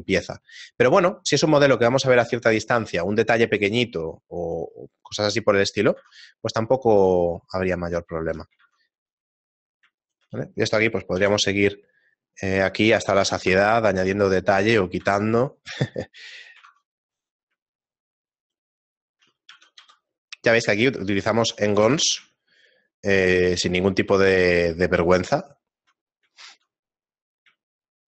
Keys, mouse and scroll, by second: 0.0 shift+middle click, 1.0-1.3 scroll down 3, 1.7 scroll down 1, 2.1 shift+middle click, 3.0-3.5 scroll down 3, 4.1 shift+middle click, 4.1 scroll up 3, 5.7 right click, 5.9 Tab, 6.3 shift+middle click, 8.9 ctrl+Tab, 9.6 right click, 10.0 shift+right click, 11.2 ctrl+b, 13.2 a, 13.9 shift+middle click, 15.0 Tab, 15.4 scroll up 2, 16.5 middle click, 16.5-16.9 scroll up 1, 16.9 ctrl+Tab, 17.4 right click, 17.8 shift+right click, 18.2 shift+right click, 19.0 shift+middle click, 19.7 g, 21.8 Tab, 22.3 shift+middle click, 26.5 middle click, 27.0-27.3 scroll up 3, 27.7 shift+middle click, 27.7 scroll up 2.